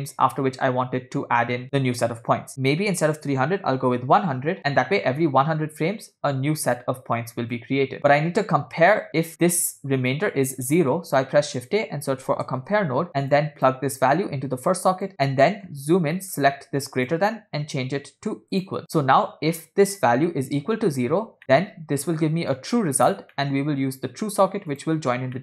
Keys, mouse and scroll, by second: 3.8 0, 4.6-5.6 scroll down 3, 6.3-6.9 drag, 7.3 click, 10.2-10.6 drag, 11.0 shift+a, 14.2 click, 15.1 middle click, 15.1 scroll up 2, 15.7 scroll up 2, 16.2 middle click, 17.0-18.8 drag, 18.8 scroll down 2, 21.4 middle click, 21.4 scroll down 2, 22.6-23.1 drag, 23.4 middle click, 24.8 drag.